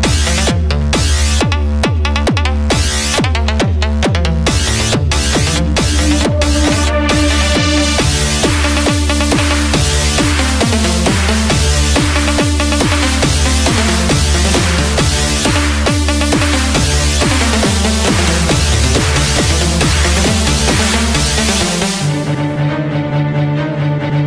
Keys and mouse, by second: 9.2-13.2 drag, 18.5 Tab, 21.2 z, 23.9 KP_Subtract.